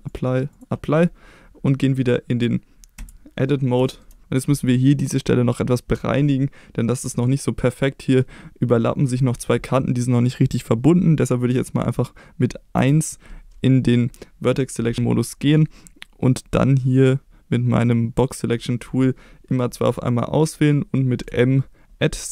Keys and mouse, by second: 0.1 click, 3.0 Tab, 3.8 shift+middle drag, 12.7 1, 16.7-18.2 drag, 21.3 m.